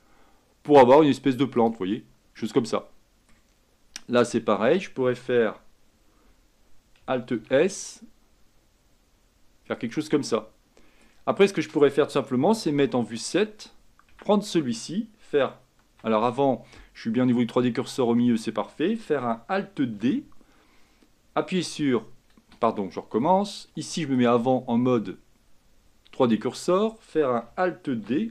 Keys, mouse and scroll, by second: 2.0-4.3 middle drag, 4.3-7.4 drag, 7.5 alt+s, 10.4-11.6 middle drag, 11.6-12.4 scroll down 1, 12.8 KP_7, 14.2 Tab, 20.1 alt+d, 24.3-28.1 drag, 28.1 alt+d.